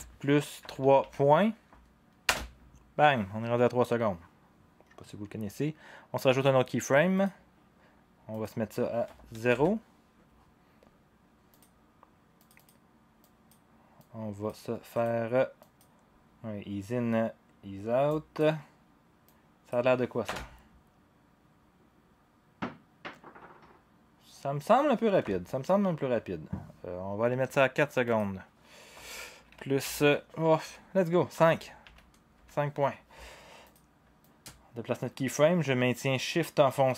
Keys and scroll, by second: 0.0-1.0 typing, 2.2 Return, 9.5 Return, 9.5 0, 20.2 0, 25.2 0, 29.8-32.9 typing.